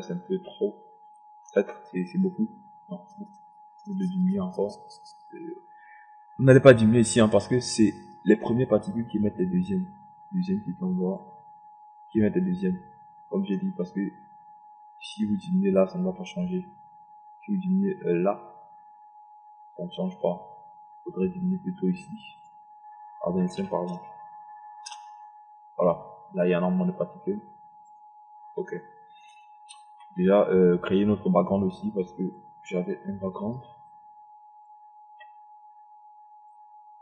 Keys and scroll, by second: 24.0 KP_2, 24.2 KP_5, 25.6 Return.